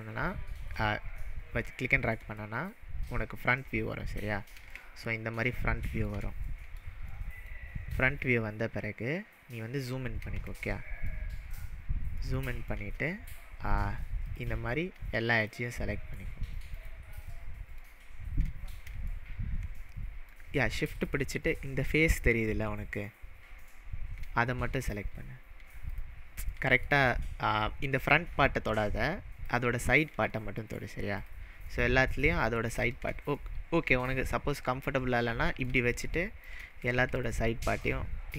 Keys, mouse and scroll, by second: 2.3 alt+middle click, 2.5-2.9 alt+middle click, 3.1-3.7 alt+middle drag, 3.9-4.5 scroll down 4, 4.8-6.2 shift+middle drag, 7.1-7.7 alt+middle drag, 9.2-10.2 scroll up 8, 10.6-11.0 shift+middle drag, 11.5 shift+scroll up 1, 12.2-12.7 shift+middle drag, 14.3 click, 15.4 shift+click, 15.9-16.3 shift+middle drag, 16.7 shift+click, 17.2-17.7 shift+middle drag, 21.0 shift+click, 24.2 shift+click, 24.8 shift+click, 25.9 shift+click, 26.6-27.1 shift+middle drag, 28.0 click, 29.5 click, 30.4-31.2 shift+middle drag, 31.2 shift+click, 31.8-32.2 shift+middle drag, 32.7 shift+click, 33.4-35.8 middle drag, 35.9-36.5 shift+middle drag, 36.9 shift+middle click, 37.2 shift+drag, 37.6-38.0 shift+middle drag.